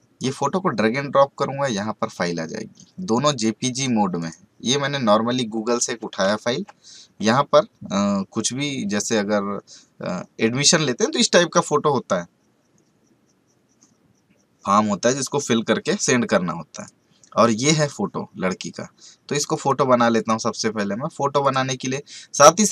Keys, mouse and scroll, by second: 3.2 click, 16.8 click, 19.5 click.